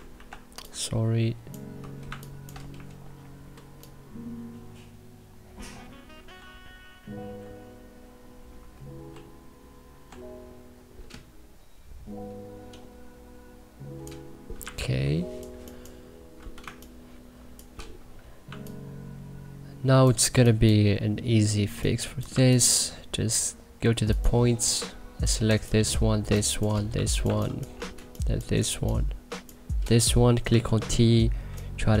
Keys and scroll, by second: 0.1 ctrl+z, 2.0 1, 6.3 ctrl+r, 18.4 1, 20.3 2, 26.9 2, 27.2 1, 30.5 t.